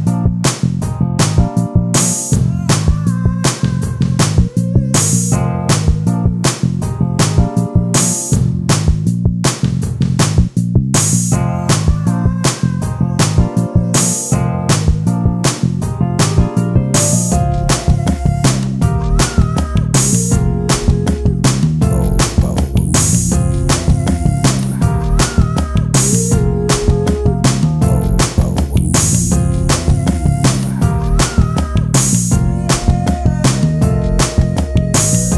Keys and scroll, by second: 14.5 space, 15.1 e, 24.1 ctrl+space, 26.8 ctrl+space, 31.1 ctrl+space, 34.0 ctrl+space.